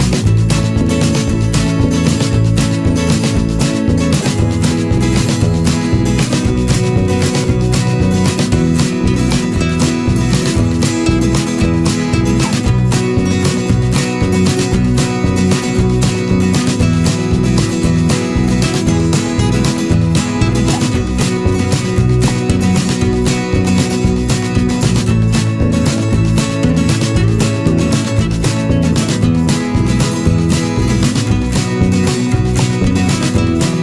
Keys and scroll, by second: 1.8 ctrl+z, 3.4 ctrl+=, 8.6 ctrl+z, 13.4 ctrl+-, 15.1 ctrl+z, 16.4 ctrl+=, 24.5 ctrl+z, 30.0 ctrl+-, 30.2 ctrl+0.